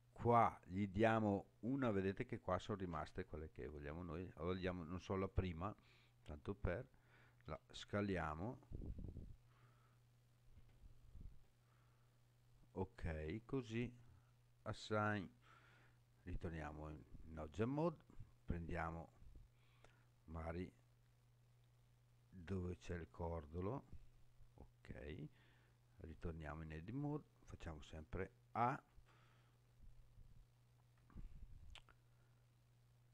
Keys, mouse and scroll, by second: 0.9-5.3 drag, 7.4 s, 12.6 click, 14.7 click, 16.5 Tab, 18.4 click, 20.5 click, 26.0 Tab, 28.5 a.